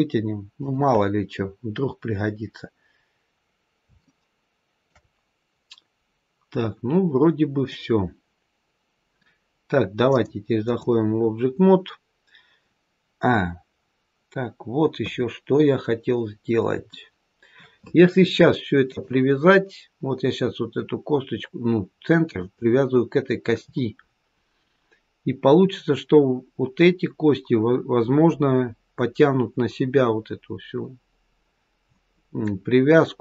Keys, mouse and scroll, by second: 2.9-3.8 scroll down 1, 3.8 scroll down 1, 4.0 shift+middle click, 5.1 middle click, 9.9 click, 14.9 KP_3, 16.0-16.6 scroll up 1, 16.8 shift+middle click, 18.8 click, 22.3 click.